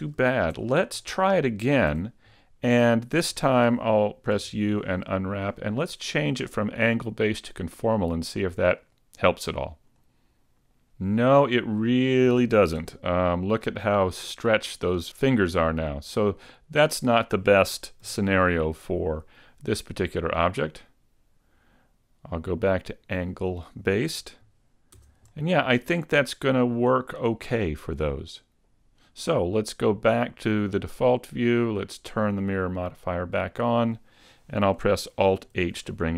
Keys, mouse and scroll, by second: 0.6 Tab, 1.0 middle click, 1.9 a, 4.4 u, 7.6 click, 11.0 scroll down 3, 11.2 middle click, 12.8 Tab, 13.6 middle click, 16.2 Tab, 19.4 u, 21.4 click, 24.2 a, 25.0 Tab, 25.3 middle click, 31.3 click, 33.0 click, 33.7 scroll down 4, 35.6 alt+h.